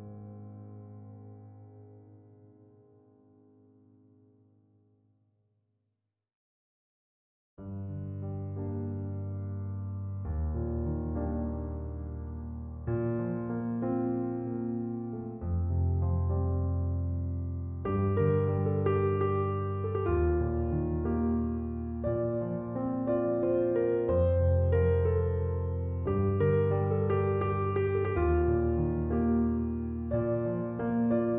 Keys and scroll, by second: 5.3 5, 5.6 Return, 31.3 1.